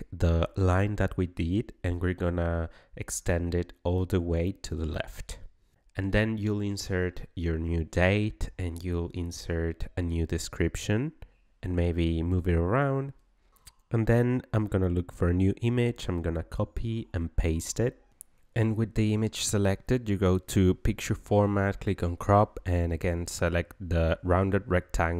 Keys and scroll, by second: 6.5 9, 6.8 1, 16.8 ctrl+v.